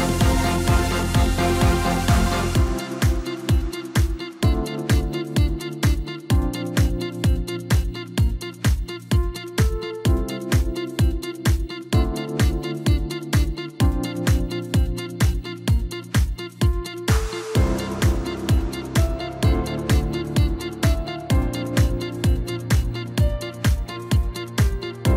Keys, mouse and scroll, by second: 2.4-5.4 drag, 9.8 scroll up 2, 10.7 s, 15.4-18.6 drag, 20.4 scroll down 2, 20.9-21.6 scroll up 2, 21.6-22.4 scroll down 1, 23.2-24.0 scroll up 1, 24.4 click.